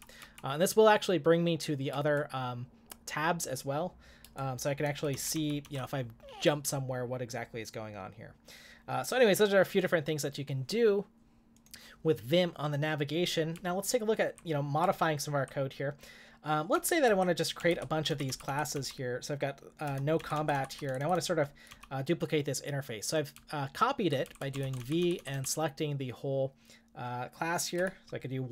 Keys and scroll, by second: 5.1 ctrl+j, 5.3 ctrl+j, 5.6 ctrl+j, 13.6 k, 14.0 k, 14.1 k, 17.4-21.6 typing, 23.1-25.8 typing, 27.5-28.3 typing.